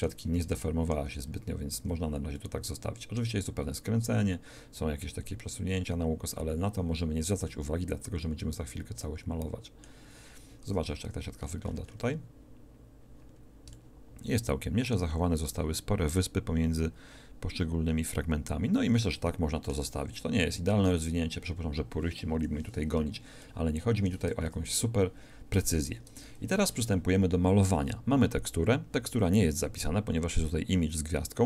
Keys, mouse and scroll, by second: 1.7 shift+Tab, 7.1 middle click, 10.7 Tab, 22.3 KP_1, 24.4 Tab.